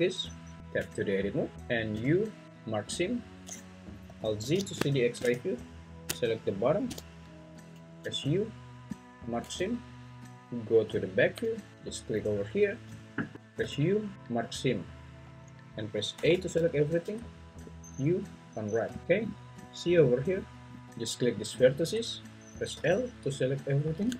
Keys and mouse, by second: 0.6 Escape, 0.6 Tab, 1.9 u, 8.0 u, 9.6 `, 12.2 alt+click, 13.6 u, 16.5 a, 17.5 u, 22.8 l.